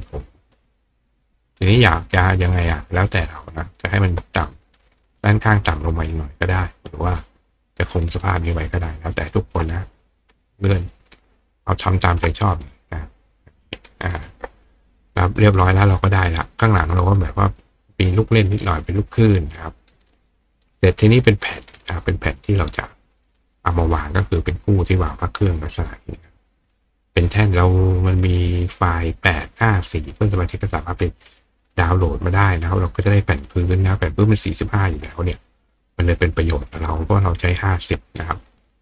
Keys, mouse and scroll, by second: 0.6 right click, 2.9 click, 3.8 right click, 4.7 click, 7.1 click, 7.9-8.3 drag, 8.9-9.3 shift+drag, 10.6 ctrl+click, 12.5 click, 13.4 click, 13.8 right click, 15.1 click, 20.1 right click, 21.4 click, 23.8 right click, 24.7 click, 34.8 click, 35.2 right click, 37.0 click.